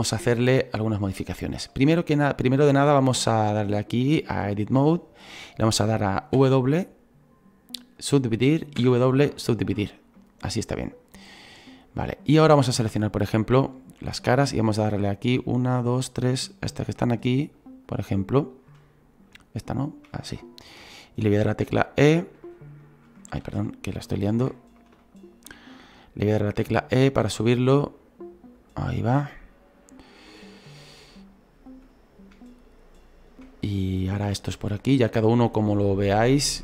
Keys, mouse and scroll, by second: 1.3 scroll down 2, 1.7-4.8 shift+middle drag, 4.8-8.1 drag, 8.1 w, 9.4 w, 10.2-12.6 middle drag, 12.6-14.0 right drag, 14.0 click, 14.8-18.8 right drag, 18.8 middle click, 19.6-21.2 shift+right drag, 21.2 e, 24.3 ctrl+z, 25.0-26.5 shift+middle drag, 26.5 e, 29.0-30.3 middle drag, 30.3 right click, 30.8-31.9 scroll down 2, 31.9-34.1 right drag, 34.1 e, 35.9-36.6 right drag.